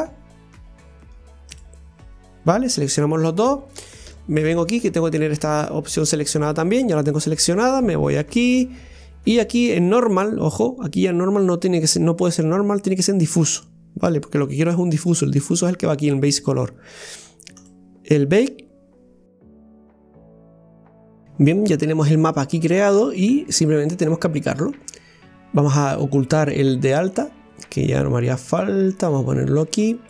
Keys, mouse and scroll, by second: 1.6 ctrl+click, 13.4 click, 26.9 click.